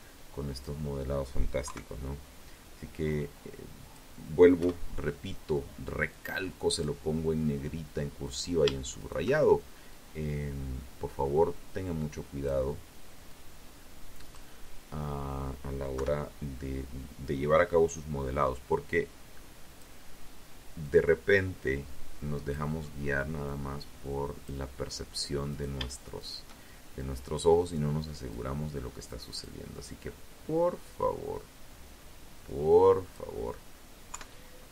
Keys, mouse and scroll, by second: 1.2 click, 2.7 KP_1, 4.2 click, 6.4 right click, 7.1 shift+right click, 8.0-10.8 drag, 11.4-12.6 drag, 14.1 KP_3, 17.0 click, 19.0-20.8 drag, 21.6 click, 23.6 right click, 24.3 shift+right click, 25.1-26.6 drag, 27.4 right click, 28.2-31.5 drag, 32.3 KP_3, 33.9 KP_1.